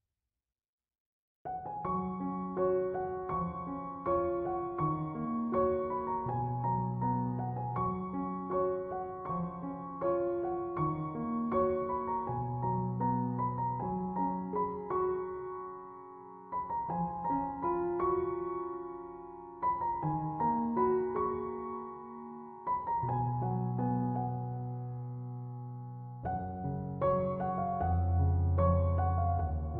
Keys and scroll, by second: 18.3-19.5 typing.